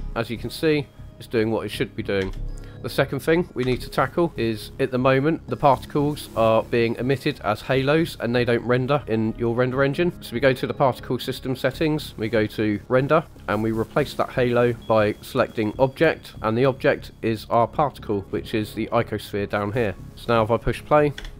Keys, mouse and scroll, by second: 2.2 space, 3.6 KP_1, 4.3 scroll up 2, 10.1-10.6 scroll down 5, 11.6-12.1 scroll down 5, 13.0 click, 13.3 scroll down 2, 14.2-15.9 drag, 16.8-18.0 drag, 18.2-18.7 scroll down 2, 19.7-20.0 scroll up 4, 20.0 click, 20.1 click, 21.1 space.